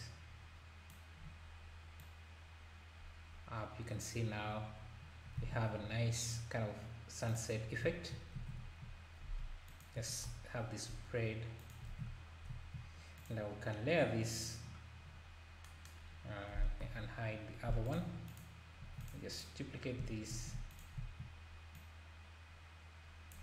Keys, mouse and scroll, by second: 2.0 click, 4.4 scroll up 1, 5.4 alt+a, 6.5-7.3 scroll down 1, 7.3 click, 7.6 scroll down 1, 8.4 s, 11.9 alt+a, 13.2 click, 15.0-15.6 scroll down 3, 16.8 alt+h, 17.8 click, 18.3 click, 18.8 x, 19.3 click, 20.4 shift+d, 21.7 click.